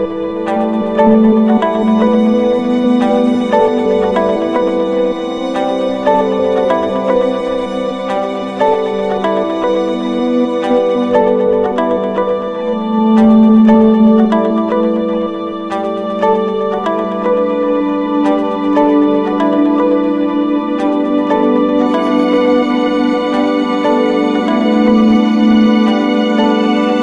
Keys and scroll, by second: 4.5 ctrl+=, 4.6 ctrl+space, 12.9 ctrl+-, 21.2 ctrl+-.